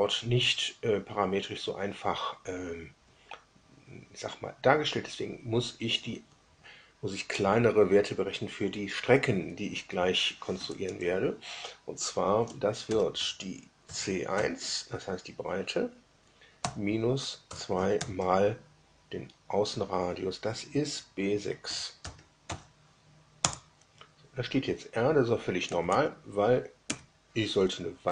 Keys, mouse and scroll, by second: 5.9 Left, 10.5 Down, 10.8 Up, 12.8 shift+0, 13.8 shift+c, 14.2 shift+1, 16.6 -, 17.4 2, 22.0 shift+b, 22.4 6, 23.3 Return, 25.7 Down, 25.8 Down, 26.8 Down, 28.0 4.